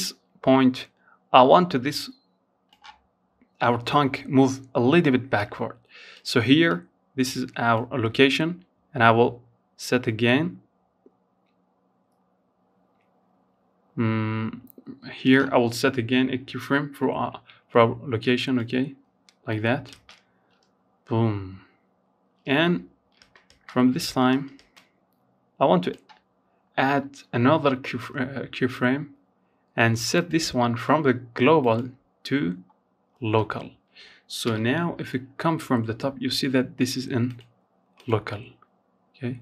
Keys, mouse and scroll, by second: 3.6-9.6 drag, 15.5 i, 17.7 click, 18.1 space, 21.4-22.8 typing, 22.9-25.9 drag, 28.3-31.4 drag, 32.6 KP_7, 35.4-38.6 drag.